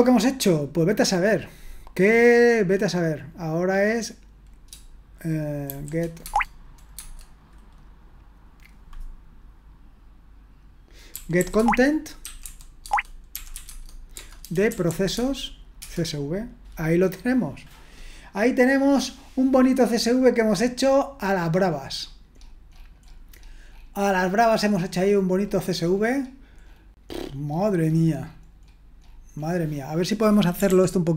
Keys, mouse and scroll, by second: 5.7-7.0 typing, 11.1-15.8 typing, 11.5 Tab, 12.8 Tab, 29.8 click, 30.7 ctrl+p.